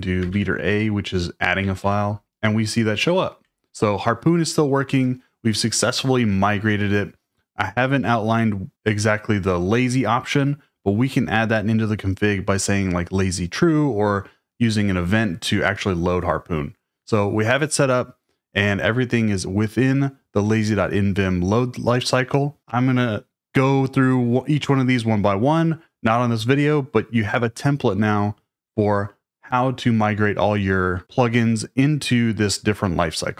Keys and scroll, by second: 0.0-2.3 typing.